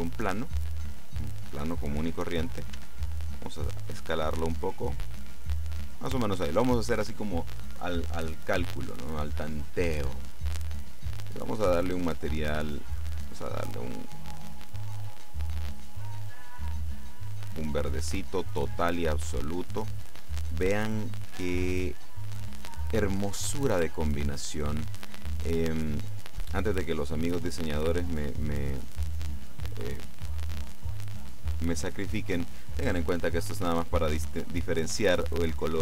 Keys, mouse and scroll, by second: 0.5 click, 2.9 s, 6.0 click, 11.3 click, 12.1 click, 13.2 click, 14.0-15.8 drag, 16.3-17.5 drag, 25.3 click, 26.5 click, 28.3-29.8 drag, 29.9-31.5 drag.